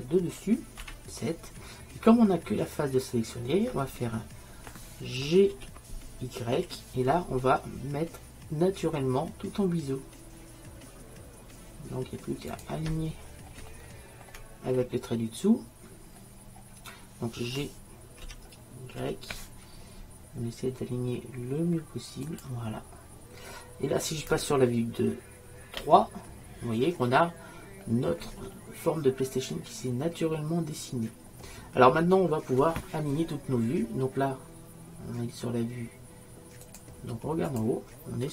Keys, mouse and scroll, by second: 5.6 g, 13.3 middle click, 15.5 middle click, 16.7 middle click, 18.3 g, 28.5-36.3 middle drag, 36.7-38.3 drag.